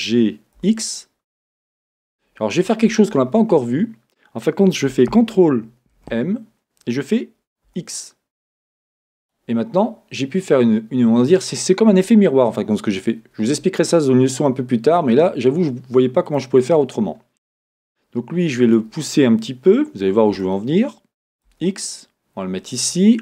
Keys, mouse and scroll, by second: 0.3 g, 1.9 click, 9.3 click, 16.3 click, 18.6 click, 20.3 g, 22.7 click.